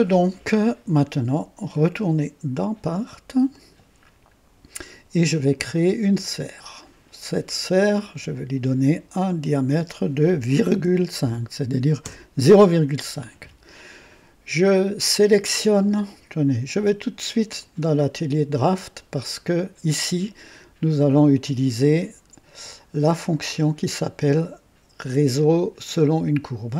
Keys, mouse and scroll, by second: 3.6 click, 6.2 click, 8.1 click, 9.4 click, 10.7 ,, 11.2 KP_5, 12.0 Return, 19.0 click, 23.5 click.